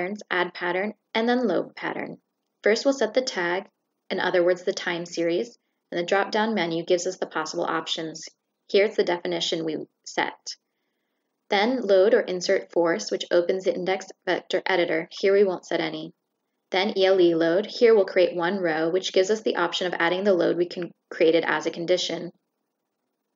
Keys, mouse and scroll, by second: 2.1 shift+click, 2.9 click, 8.8 click, 10.6 click, 11.9 click, 14.1 click, 15.4 click, 15.9 click, 16.9 click, 17.9 click, 18.3 click, 19.7 shift+click, 20.5 shift+click.